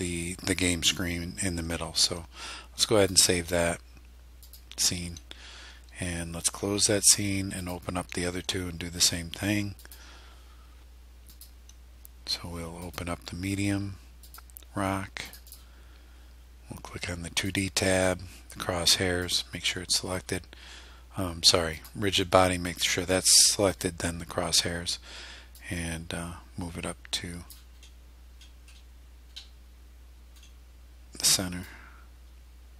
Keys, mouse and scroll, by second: 3.1 click, 4.5 click, 7.7 click, 9.9 click, 11.4 click, 12.9 click, 14.3 click, 15.3 click, 17.5 click, 19.3 click, 21.8 click, 23.8 click, 25.6-27.7 drag, 27.8 scroll up 1, 28.4-29.1 scroll down 2, 29.3 scroll up 1, 29.4-30.6 middle drag, 31.7-32.7 drag.